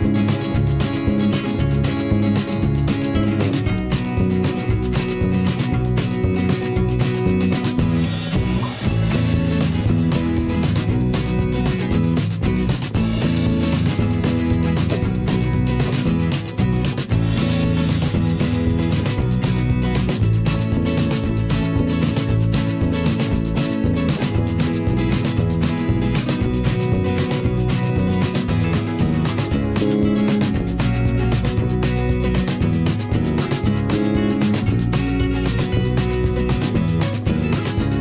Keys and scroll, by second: 4.1 ctrl+z, 16.5 v, 17.0 i, 17.8 v, 22.9 p, 33.7 v, 34.0 p, 37.5 v.